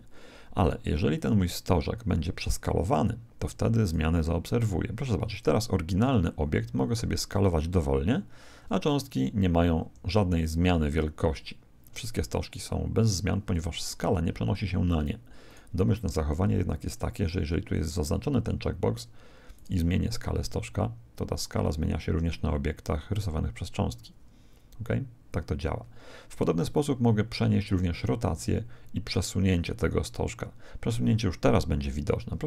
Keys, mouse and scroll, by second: 1.1 right click, 3.8-7.2 right drag, 6.5 s, 15.5 right click, 16.8 click, 19.5 right click, 20.4 s, 26.7 right click.